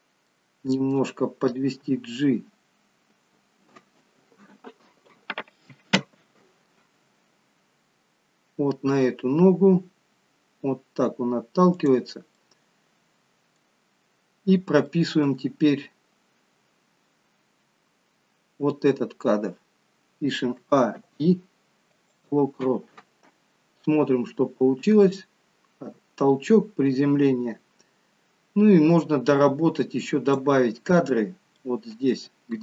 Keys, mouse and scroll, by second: 0.4 middle click, 2.9 g, 12.5 middle click, 13.9-14.5 scroll down 2, 14.8 middle click, 20.7 a, 21.0 i, 23.9 click, 31.6 middle click.